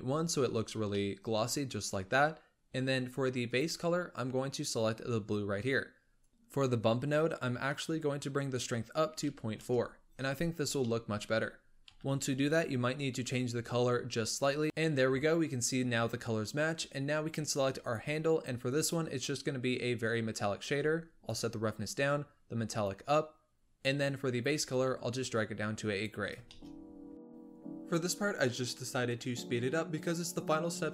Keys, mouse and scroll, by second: 0.1-0.7 scroll up 1, 0.7 scroll down 1, 0.9-3.4 middle drag, 3.4 click, 6.1-7.7 drag, 10.8-11.8 middle drag, 11.8 KP_7, 12.8-14.1 scroll up 2, 14.1 click, 14.6-17.7 middle drag, 17.7 click, 18.7-23.6 drag, 23.6-24.2 middle drag, 24.2 click, 26.4-28.1 shift+middle drag, 28.1 click, 28.3-28.6 shift+scroll down 7, 28.3 shift+middle drag, 28.7 click, 29.0 g, 29.3 KP_7, 29.5 scroll up 4, 29.7 g.